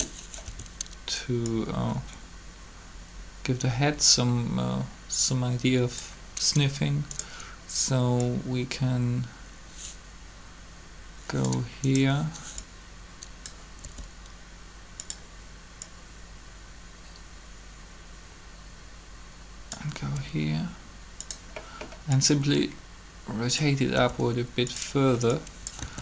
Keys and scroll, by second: 13.8 r, 20.0 r, 25.8 alt+a.